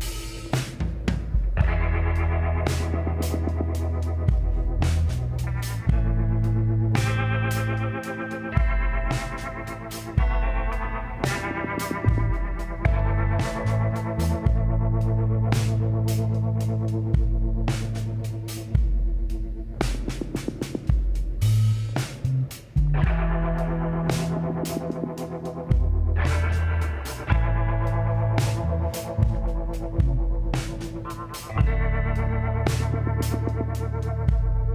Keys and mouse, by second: 0.2-2.0 drag, 2.6-5.4 drag, 4.8 s, 7.1-9.1 drag, 8.1 g, 11.4-13.1 drag, 11.5 g, 13.7-19.0 drag, 13.9 g, 19.3-21.1 drag, 20.4 g, 21.8-23.5 drag, 22.2 g, 23.6-25.4 drag, 23.9 g, 26.4-30.5 drag, 29.7 z, 31.7 click, 32.4 l, 32.7 click, 34.3 s.